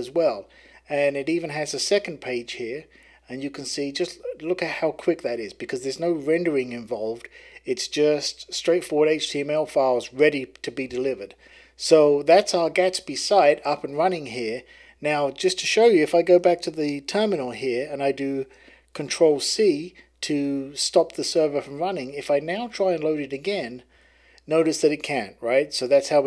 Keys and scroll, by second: 19.4 ctrl+c, 23.5 Right, 23.9 Return.